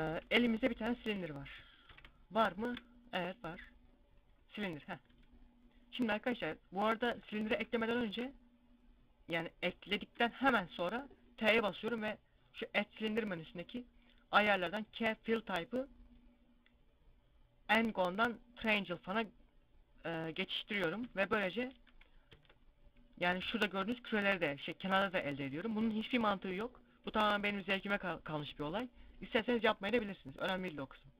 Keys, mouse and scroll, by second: 0.1 scroll down 1, 0.1 shift+s, 1.7 ctrl+KP_Decimal, 2.3 shift+a, 4.5 scroll up 2, 5.0 Tab, 5.9 middle click, 6.9 Tab, 7.4 x, 7.9 shift+a, 10.1 t, 21.8 t, 22.1 Tab.